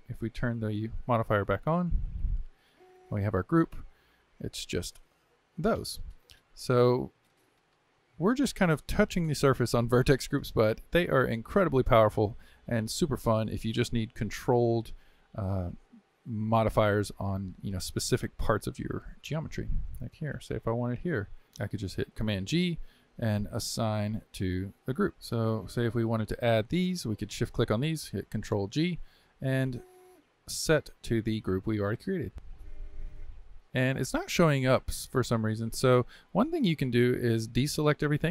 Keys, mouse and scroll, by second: 0.4 click, 2.1 click, 3.8-6.9 middle drag, 9.4-20.1 shift+middle drag, 20.1 click, 22.1 ctrl+g, 25.1 ctrl+z, 25.2 click, 26.4 shift+click, 27.3 shift+click, 28.7 ctrl+g, 32.3 Tab, 33.2 click, 33.6 Tab, 36.0-38.3 middle drag.